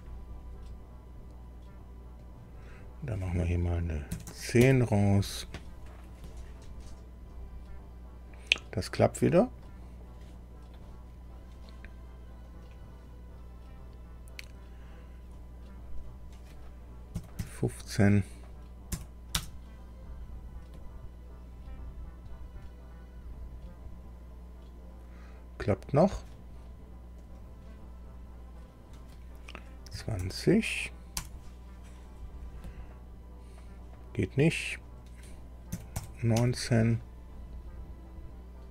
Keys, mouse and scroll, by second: 2.2 click, 4.1 KP_1, 4.3 KP_0, 4.6 KP_Enter, 9.6-10.9 middle drag, 12.5 click, 16.0 click, 17.1 KP_1, 17.4 KP_5, 18.9 Delete, 19.3 Return, 27.2 click, 28.6 click, 29.9 KP_2, 30.2 KP_0, 31.1 Tab, 34.7 click, 35.7 KP_1, 36.3 KP_9, 36.3 Tab.